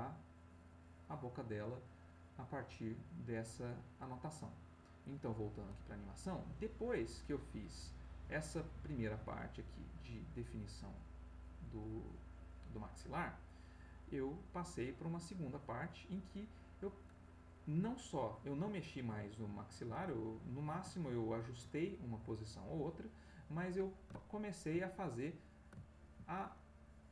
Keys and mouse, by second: 5.0 click, 6.6-13.5 drag, 14.2 click, 15.3 click, 19.2-20.2 ctrl+middle drag, 20.3 ctrl+shift+middle click, 21.2 ctrl+shift+middle click, 22.4-23.6 drag, 24.3 ctrl+middle click, 25.8 ctrl+middle click, 26.8-27.1 drag.